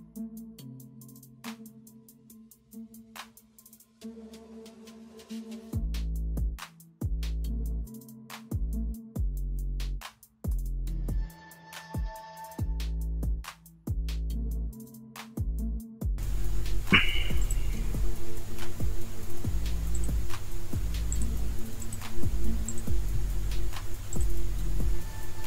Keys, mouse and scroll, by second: 0.3 space, 1.1 alt+click, 2.1 alt+click, 2.7 alt+click, 3.3 alt+click, 4.0 space, 4.3 alt+click, 4.4-4.7 alt+scroll up 1, 4.9-5.3 alt+scroll down 1, 5.3 alt+click, 5.8 alt+click, 6.1 space, 7.1 alt+click, 7.6 alt+click, 8.1 alt+click, 8.3 alt+scroll down 1, 8.6 ctrl+alt+z, 9.4 alt+click, 9.8 alt+click, 10.3 alt+click, 10.8 alt+click, 11.0 space, 11.6 alt+click, 12.2 alt+click, 12.3-12.6 alt+scroll down 1, 12.6 space, 13.6 space, 14.0 alt+click, 14.1-14.4 alt+scroll up 1, 14.4 alt+scroll down 1, 15.4 alt+click, 15.6 space, 15.7 alt+scroll up 1, 16.0 alt+scroll down 1, 16.8 alt+scroll up 1, 17.0 alt+scroll down 1.